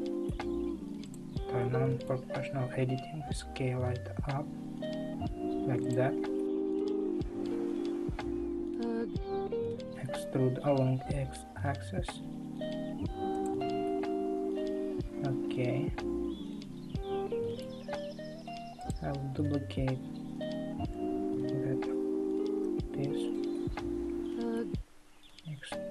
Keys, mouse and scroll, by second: 1.0 click, 1.6-3.3 middle drag, 3.3 s, 6.4-10.0 middle drag, 10.0 e, 13.8-18.9 middle drag, 18.9 click, 20.8 shift+d, 23.5-25.3 middle drag, 25.3 e.